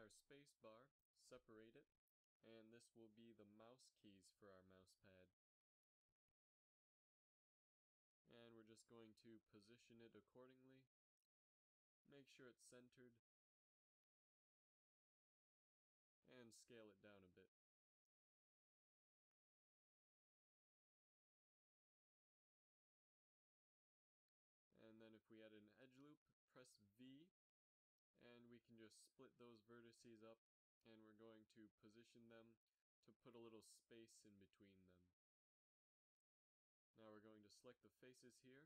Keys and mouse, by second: 1.3 p, 2.1 Tab, 3.4 g, 4.8 ctrl+alt+shift+c, 6.3 KP_7, 6.6 z, 7.4-7.8 middle drag, 8.2 g, 11.2 g, 13.6 z, 14.2 middle click, 14.8 g, 15.6 Tab, 16.0 a, 16.1 a, 16.6 a, 16.9 s, 19.5 g, 22.6 a, 23.3 ctrl+r, 25.0 v, 28.1 a, 28.4 z, 28.7 b, 29.2-31.0 drag, 29.3 ctrl+Tab, 30.0 b, 31.3 g, 33.1 z, 33.9 a, 36.0 z, 37.3 click.